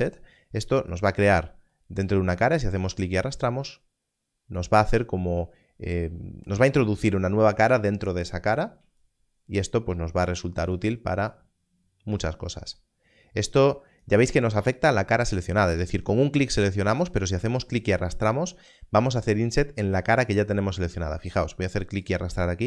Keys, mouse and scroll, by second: 0.9 click, 9.0 click, 22.0 click.